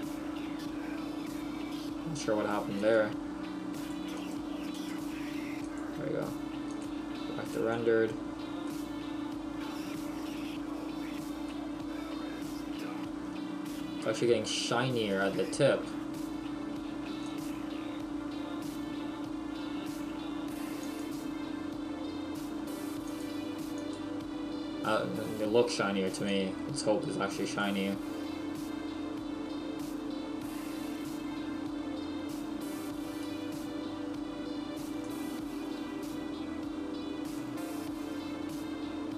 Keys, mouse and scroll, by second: 0.5-0.8 scroll up 1, 2.8 click, 6.7 click, 8.7 middle click, 10.1 scroll up 2, 10.6-11.1 scroll up 1, 11.5 middle click, 13.2-13.5 scroll up 1, 15.4 shift+middle click, 17.4 click, 23.2 click, 26.4 click, 37.3 middle click.